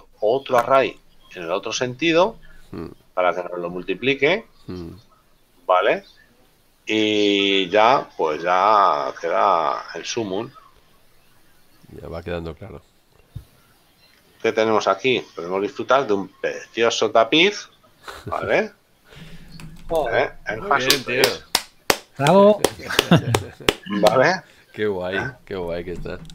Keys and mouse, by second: 10.2 click, 12.5 click, 14.2 shift+middle click, 17.2 shift+middle click, 22.9 middle click.